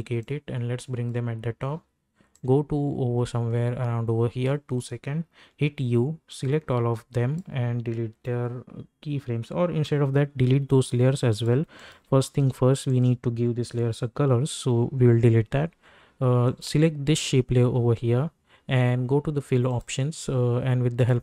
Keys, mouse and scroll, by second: 0.2-5.4 drag, 5.4 u, 6.3-9.8 drag, 11.3 click, 16.4 click, 19.7 click.